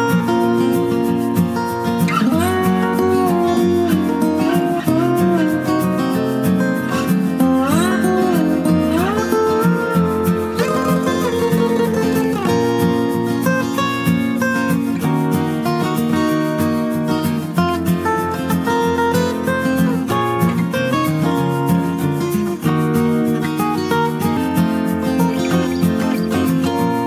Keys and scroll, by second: 22.4 ctrl+space, 22.8 ctrl+space, 23.2 ctrl+space.